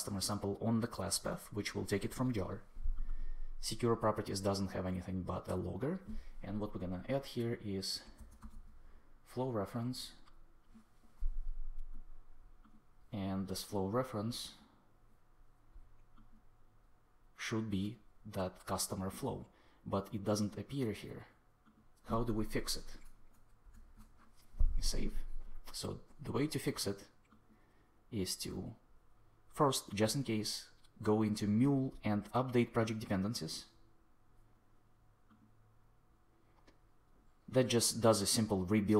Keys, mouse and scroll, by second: 7.7-8.9 typing, 23.6 super+s, 32.7 click.